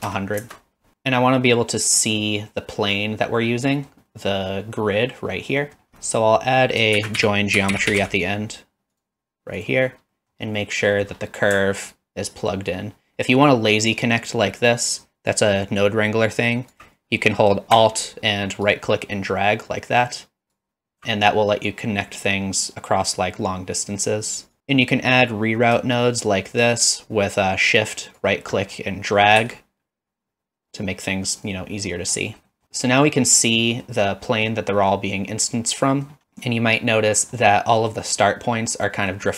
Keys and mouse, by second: 0.1 KP_0, 1.3 middle drag, 2.0 middle click, 3.6 middle click, 4.1 middle click, 5.6 middle click, 6.2 middle click, 6.6 middle click, 7.0 shift+a, 10.3 middle click, 10.8 middle click, 12.9-16.7 alt+right drag, 19.7-20.5 alt+right drag, 24.6 ctrl+z, 26.2-28.2 shift+right drag, 32.6 middle click, 32.9 middle click, 33.7 middle drag, 34.3 middle drag, 36.0 middle click, 36.2-37.3 middle drag, 37.9 middle drag, 38.9 middle click.